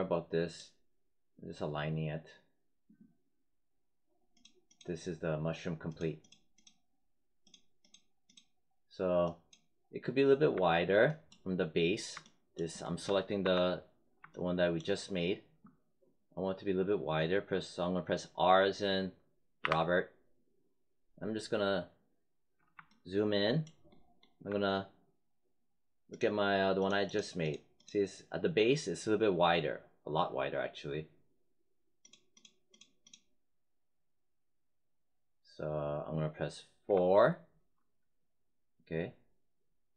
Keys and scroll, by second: 13.3 5, 19.5 r, 36.8 4.